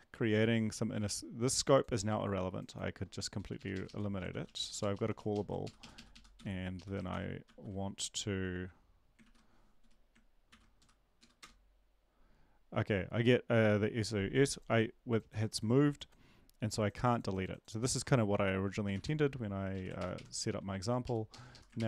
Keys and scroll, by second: 3.5 shift+Up, 3.7 shift+Up, 3.9 shift+Left, 4.3 ctrl+x, 4.5 Down, 4.6 Left, 4.8 Down, 4.9 Left, 5.1 Down, 5.3 Left, 5.6 shift+Up, 5.8 shift+Up, 6.3 shift+Up, 7.1 shift+End, 7.5 shift+Left, 9.8 ctrl+`, 9.8 Up, 10.5 ctrl+l, 10.8 Up, 11.2 Down, 11.4 Return, 18.9 ctrl+`, 20.0 Up, 20.0 ctrl+Right, 20.1 ctrl+Right, 21.8 Up, 21.8 Left, 21.8 ctrl+shift+Right.